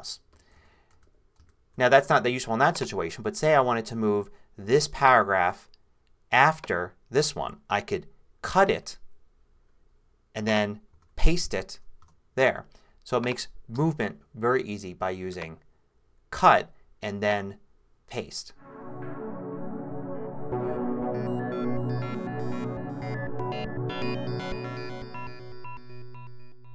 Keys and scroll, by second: 0.5 super+z, 8.4 super+x, 10.9 super+v, 12.0 super+Return, 13.8 BackSpace.